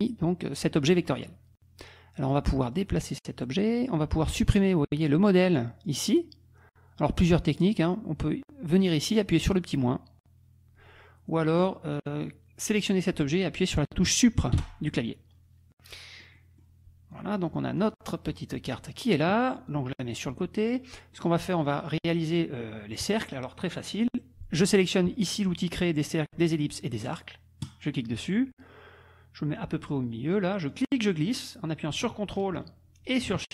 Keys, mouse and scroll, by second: 2.8-3.9 drag, 4.5-8.9 drag, 11.6 click, 12.0 click, 14.5 Delete, 15.8 click, 19.7-20.9 drag, 21.2 click, 27.7 click, 30.7-33.5 drag.